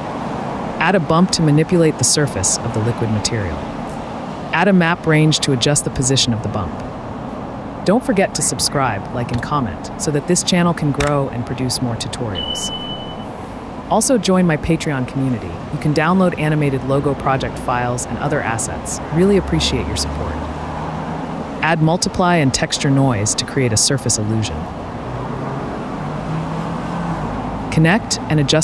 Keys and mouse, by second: 2.3 shift+a, 5.0 shift+a, 9.3 g, 10.1 g, 10.3 x, 12.5 middle click, 14.6 middle click, 17.8-19.3 right drag, 19.9-21.5 shift+right drag, 21.7 ctrl+z, 22.5 shift+a, 24.8 shift+a, 27.0-27.8 middle drag, 27.8-28.3 drag.